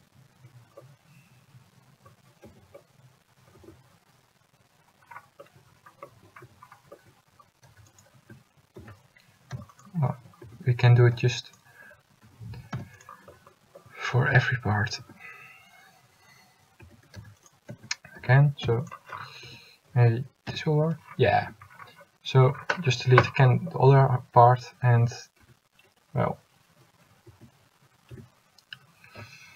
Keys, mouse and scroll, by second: 2.6 Tab, 3.7 Tab, 6.6 a, 8.0 c, 9.0 s, 10.6 a, 11.6 s, 11.6 c, 14.4 s, 14.4 0, 16.9 a, 17.5 c, 18.3 s, 19.6 a, 20.6 l, 21.6 a, 24.1 a, 25.5 l, 26.3 l, 27.4 a, 28.3 l, 29.3 x.